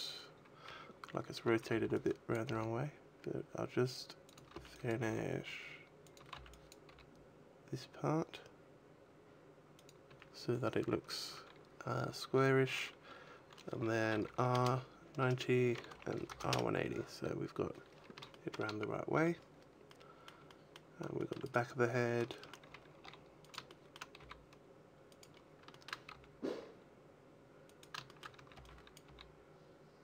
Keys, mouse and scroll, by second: 1.0 scroll up 1, 1.3 a, 1.6 b, 2.3 g, 4.2 click, 4.2 a, 4.6 b, 4.9 g, 6.0 click, 6.0 a, 6.2 b, 6.8 g, 9.7 click, 9.9 a, 11.1 a, 14.0 r, 15.8 r, 18.2 shift+middle click, 18.7-19.0 scroll down 3, 19.0 a, 19.7 middle click, 20.3 middle click, 21.0 shift+middle click, 21.3 right click, 22.2 shift+middle click, 22.5 a, 22.8 g, 23.4 click, 23.5 shift+middle click, 24.1 g, 25.1 click, 25.2-25.5 scroll up 5, 25.6 shift+middle click, 26.0 g, 27.5 click, 27.8 shift+middle click, 28.2 a, 28.4 b, 28.9 g.